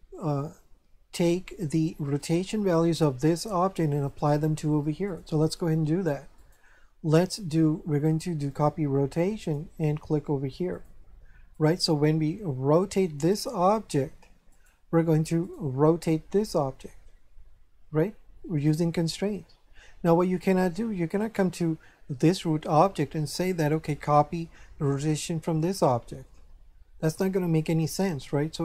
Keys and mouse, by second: 2.2 right click, 4.0 right click, 6.4 right click, 7.2 click, 8.5 click, 10.7 click, 11.5 right click, 12.6 r, 14.5 right click, 21.1 right click.